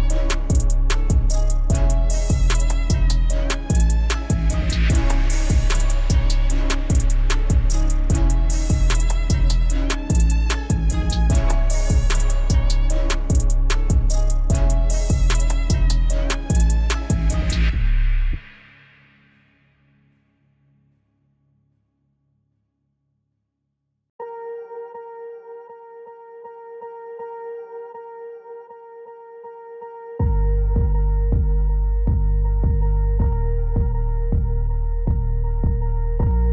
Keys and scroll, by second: 1.9 F4, 9.8 ctrl+z, 15.0 ctrl+z, 18.3 F4.